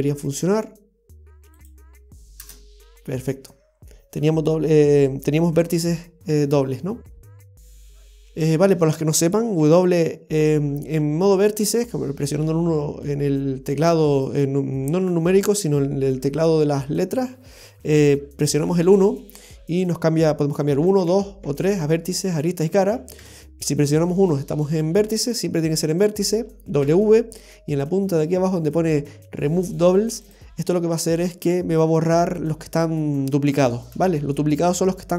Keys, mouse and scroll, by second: 3.0 scroll up 1, 6.4-6.7 scroll down 1, 6.7 middle click, 8.2 shift+middle click, 9.6 w, 33.8 scroll up 1.